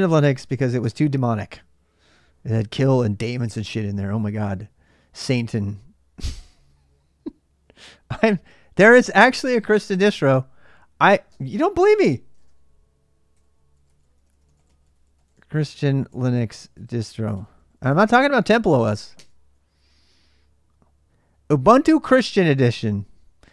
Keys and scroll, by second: 11.6-17.8 typing, 18.9 typing.